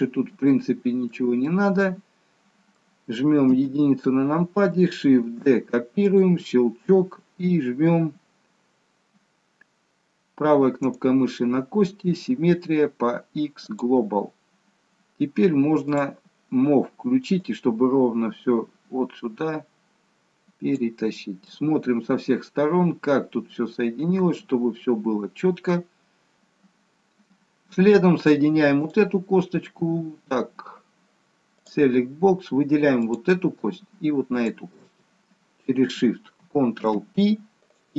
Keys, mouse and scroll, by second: 3.6 KP_1, 5.2 shift+d, 10.9 right click, 15.9 click, 17.4 click, 21.5 middle click, 26.4 shift+middle click, 26.4 KP_3, 27.1-27.5 scroll up 2, 28.8 click, 31.6 click, 34.3 shift+click, 34.7 shift+click, 36.7 ctrl+p.